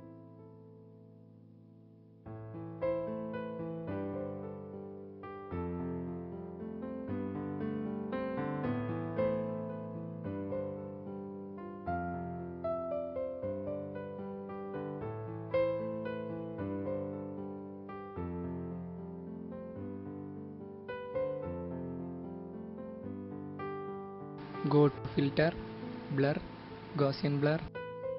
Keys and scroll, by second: 2.9 alt+shift+Return, 11.0 alt+shift+Delete, 14.3 alt+shift+Delete, 15.0 ctrl+t, 17.5 Return, 22.2 ctrl+alt+shift+e.